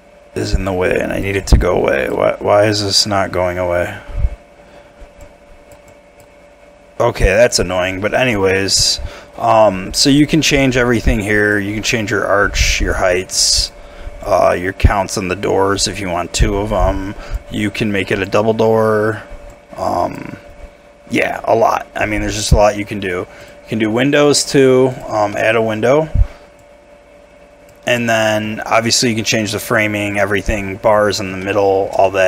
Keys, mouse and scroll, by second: 20.5 scroll down 1, 22.5 middle click, 23.0 scroll down 1, 25.3 middle click, 25.7 scroll up 1, 28.0 middle click, 31.4 shift+middle click, 32.0 shift+middle click.